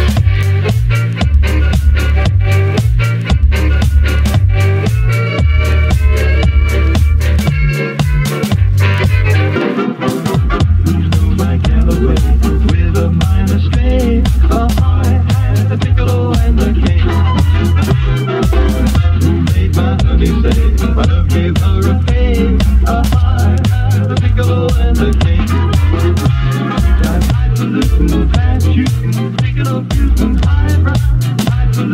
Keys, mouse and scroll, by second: 4.8 shift+a, 6.3-6.9 alt+right drag, 6.9 click, 9.5-17.2 drag, 20.0-31.5 drag, 31.5 r.